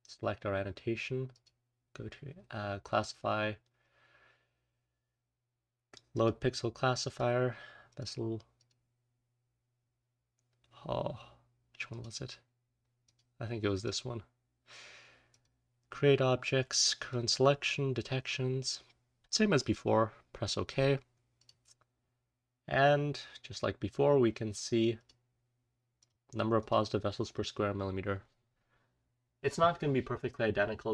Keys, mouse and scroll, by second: 0.0 click, 1.3 click, 1.3-3.0 scroll down 1, 3.0-6.2 scroll down 1, 21.9-23.8 scroll up 1, 23.8-25.2 scroll up 1, 24.9 click, 25.9 click, 26.5 click.